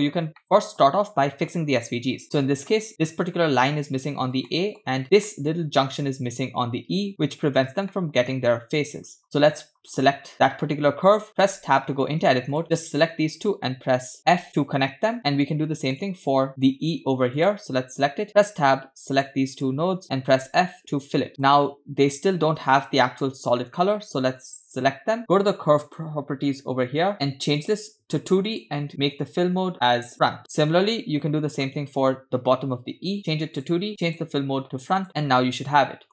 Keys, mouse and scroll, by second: 0.4-0.8 shift+middle drag, 2.4-2.8 middle drag, 4.5-4.8 shift+middle drag, 5.0 scroll up 2, 5.3 shift+middle drag, 5.6 scroll up 3, 7.1-7.9 scroll down 5, 8.0 shift+middle drag, 9.0-9.9 scroll up 4, 9.2 shift+middle click, 9.9 click, 12.5 Tab, 12.5 click, 13.0 shift+click, 14.4 f, 15.8 Tab, 15.9 shift+middle click, 17.4 click, 18.9 Tab, 19.2 click, 19.6 shift+click, 20.4 f, 21.3 Tab, 21.3 shift+middle click, 21.3 scroll down 2, 21.6 scroll up 2, 23.7 middle click, 24.4 click, 25.9 click, 27.7 click, 28.5-30.2 drag, 30.4 scroll down 2, 30.5 shift+middle drag, 31.6 click, 33.2 click, 33.6 click, 34.1-35.1 drag, 35.1-36.1 middle drag.